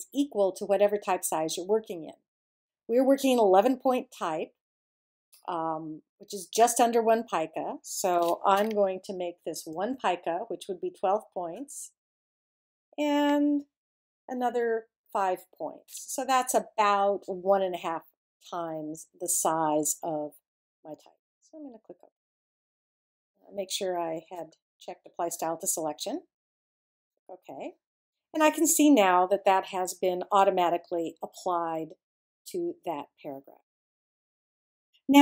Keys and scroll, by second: 9.7 i, 15.0 5.